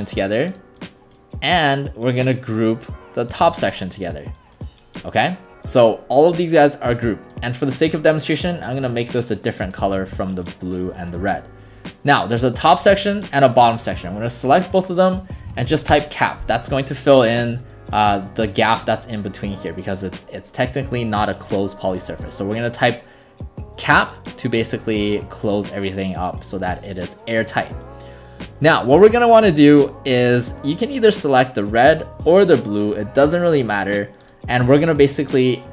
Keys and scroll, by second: 3.5 ctrl+g, 15.3-16.2 typing.